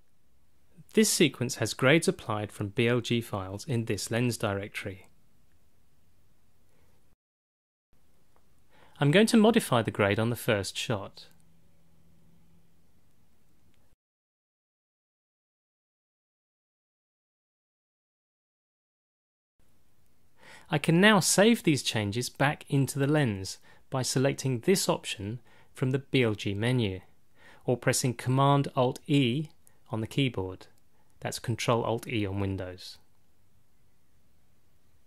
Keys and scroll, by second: 29.4 alt+super+e, 31.6 alt+super+e.